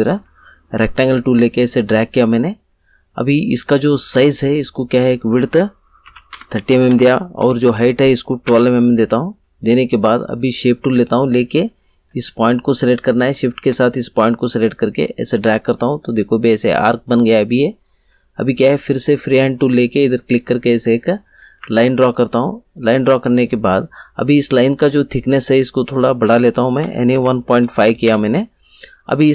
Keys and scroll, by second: 6.0 3, 6.3 0, 6.8 Tab, 7.3 1, 7.6 2, 8.4 Return, 26.5-28.0 typing, 28.0 Return.